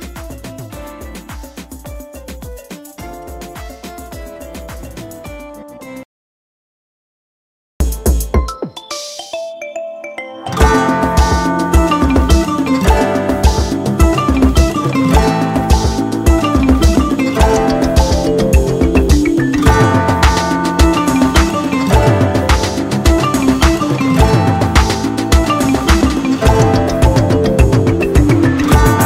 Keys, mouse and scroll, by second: 2.9 super+Return, 3.5 super+p, 5.4 Down.